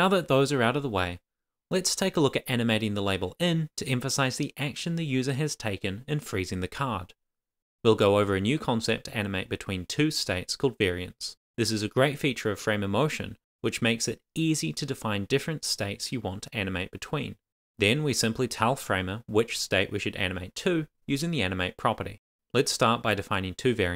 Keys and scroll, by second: 17.0 Return, 17.3 Tab, 17.5 shift+;, 17.6 shift+space, 17.6 shift+[, 17.7 Return, 18.9 shift+;, 19.0 shift+space, 19.0 shift+[, 19.0 Return, 19.2 Down, 19.8 Return, 20.4 shift+;, 20.6 shift+[, 20.6 Return, 21.1 Up, 21.2 Left, 22.4 Tab, 23.3 shift+;, 23.4 shift+space.